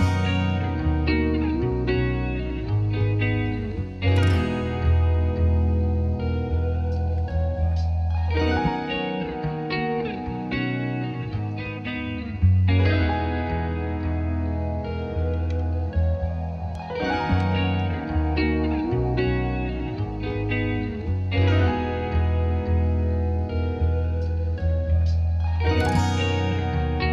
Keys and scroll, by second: 8.2-9.1 typing, 9.3 Return.